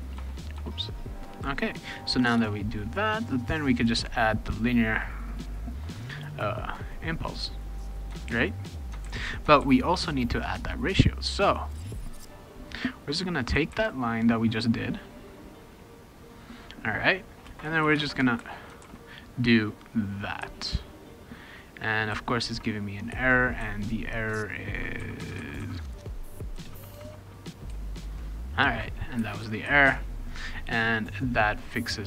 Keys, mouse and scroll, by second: 0.0-0.5 typing, 2.4 Return, 7.1 click, 8.3 ctrl+c, 8.8 click, 9.0 ctrl+v, 9.6 ctrl+s, 10.1 click, 12.3-13.4 drag, 13.7 ctrl+c, 14.2 click, 17.5 space, 17.8 shift+8, 18.4 ctrl+v, 18.8 ctrl+s, 25.9 BackSpace, 27.1 shift+0.